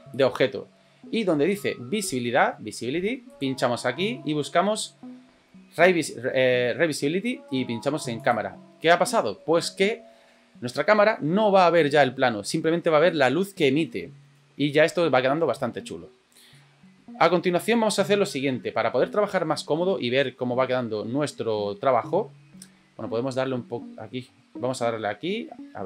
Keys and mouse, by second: 0.1 click, 3.3 click, 8.2 click, 16.5-16.9 middle drag, 24.7-25.8 drag.